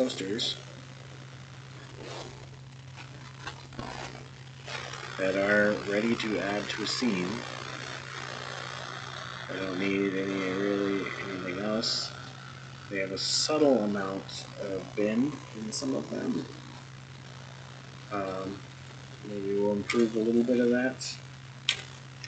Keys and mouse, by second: 0.0 click, 4.8-9.2 middle drag, 10.2-12.3 middle drag, 13.3-16.4 middle drag, 17.2-18.3 middle drag, 18.8 click, 19.8 Tab, 20.2 click, 21.6 2.